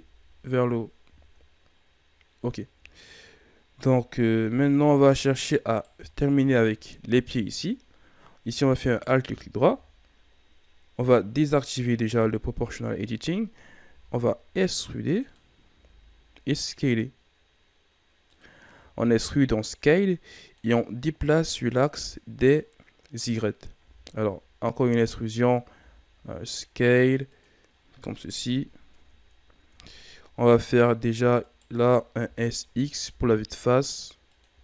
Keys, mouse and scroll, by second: 1.1 shift+scroll down 3, 1.9-3.3 scroll up 10, 4.5 KP_3, 5.7 right click, 5.9 Tab, 6.4 shift+scroll down 1, 6.8-7.8 scroll up 1, 7.8-8.8 scroll up 1, 8.8 alt+right click, 12.1 o, 13.8 e, 15.7 s, 18.8-19.9 shift+scroll down 2, 19.9-23.7 drag, 23.7 e, 25.7 s, 28.2 KP_1, 28.9 Tab, 29.7 Tab, 31.4 alt+right click, 32.2 s.